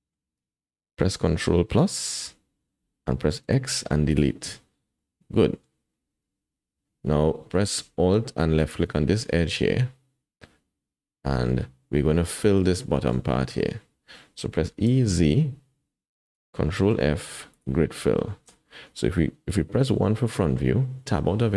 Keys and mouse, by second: 1.9 ctrl+KP_Add, 3.4 x, 5.0 click, 5.2 middle click, 9.1-10.3 drag, 10.3-11.5 middle drag, 12.5 middle click, 12.9 shift+middle click, 14.6 e, 16.8 ctrl+f, 18.3 shift+click, 20.7 KP_1, 21.0 Tab.